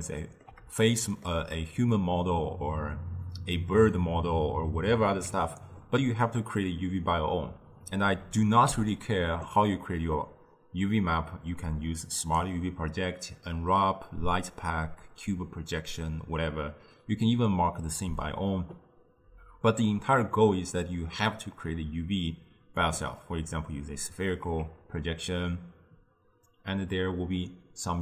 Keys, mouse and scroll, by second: 5.2 Tab, 8.7 u, 24.5 Tab.